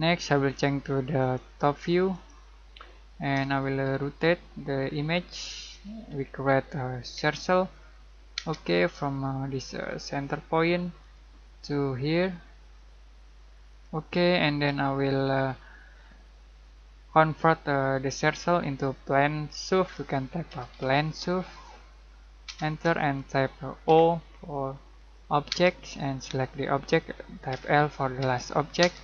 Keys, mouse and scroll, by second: 1.2 click, 2.9 middle click, 3.5-5.4 shift+middle drag, 5.4-6.0 scroll up 1, 7.1 c, 8.3 space, 11.0 click, 13.7 click, 20.2-22.4 typing, 23.8 o, 25.4 space, 27.5 l, 28.8 space.